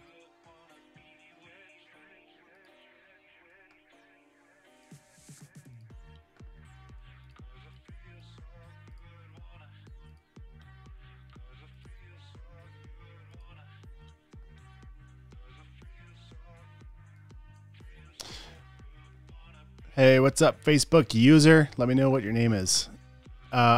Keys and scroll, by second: 3.9 super+w, 7.1 space, 8.2 space, 14.4 super+w.